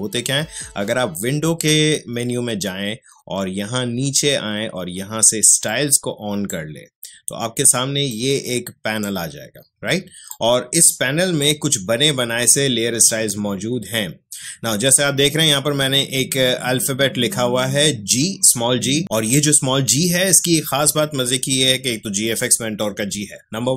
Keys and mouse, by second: 5.6-23.7 drag.